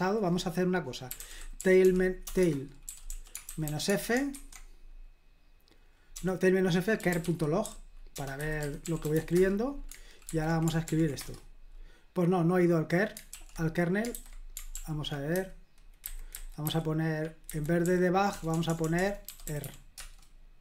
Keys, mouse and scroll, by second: 0.9-4.3 typing, 6.1-9.6 typing, 10.3 super+h, 10.9 ctrl+p, 11.2 Return, 13.3 super+l, 14.1 super+h, 14.7 ctrl+p, 16.0 alt+b, 16.4 alt+b, 16.7 alt+b, 17.5 alt+b, 18.3 alt+f, 18.5 BackSpace, 18.8 BackSpace, 19.6 BackSpace.